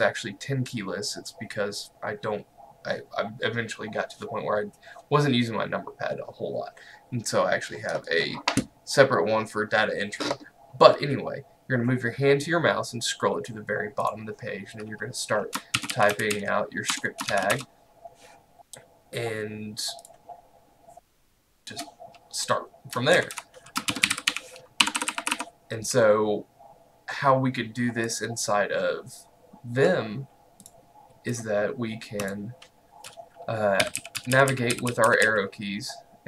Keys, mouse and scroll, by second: 30.7 click, 31.6-32.3 scroll up 1, 32.3 click, 33.6-35.8 typing.